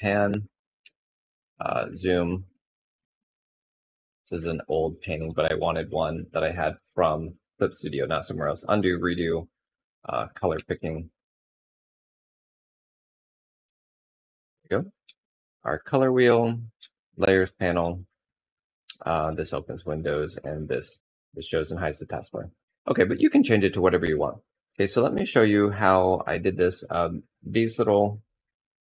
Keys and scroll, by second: 0.6 alt+space, 4.9 ctrl+z, 14.6 F6, 16.3 F7.